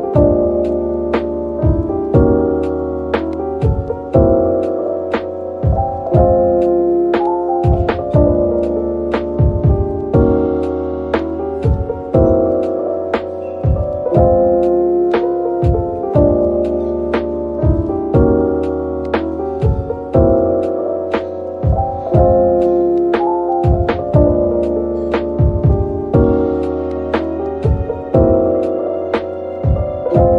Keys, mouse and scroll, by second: 7.1-7.4 scroll down 1, 12.7 scroll up 1, 19.2-19.8 scroll down 1, 19.8-20.6 scroll down 1, 28.7 typing.